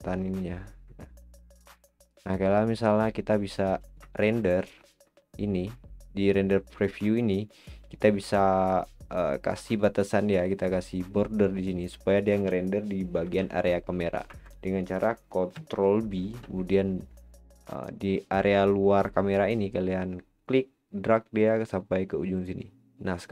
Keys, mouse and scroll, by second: 0.1-1.1 shift+middle drag, 1.3-2.1 scroll down 6, 2.1-3.9 shift+middle drag, 3.9 scroll up 2, 4.2-7.2 shift+middle drag, 7.6-10.6 shift+middle drag, 13.1 ctrl+b, 16.0 ctrl+b, 18.7-22.4 drag.